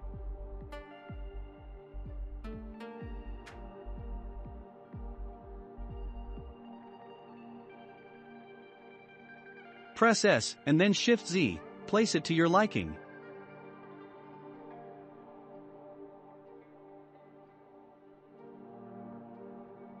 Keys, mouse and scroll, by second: 1.2 click, 1.8-2.4 middle drag, 2.4 scroll up 2, 3.4-5.3 drag, 5.3 scroll down 4, 5.8 click, 6.4-6.8 scroll down 2, 6.8-7.8 shift+middle drag, 7.8-8.4 scroll up 4, 8.3 click, 8.7-9.6 middle drag, 9.6 s, 13.0-14.0 shift+middle drag, 14.0 click, 16.2 click, 16.8-17.4 scroll down 5, 17.4-19.0 shift+middle drag, 19.0-20.0 drag.